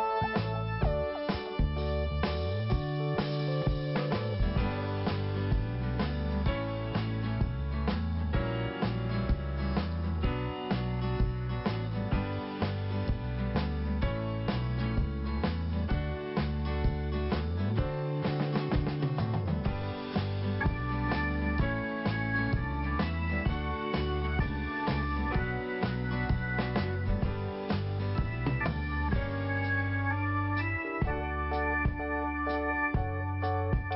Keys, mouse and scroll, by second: 0.2 click, 3.6 click, 4.2 click, 5.7 click, 5.8 click, 6.6 click, 7.5 click, 8.9 click, 10.7 click, 12.1 click, 14.9 ctrl+5, 16.3 click, 17.8 scroll up 1, 17.9 right click, 19.2 click, 20.3 click, 20.9 click, 21.5 scroll down 2, 21.5 click, 22.1 right click, 22.6-22.9 scroll up 1, 24.7-25.2 scroll down 1, 25.6 scroll up 1, 27.4 click, 28.7 click, 29.9 click, 31.2 click, 33.4 click.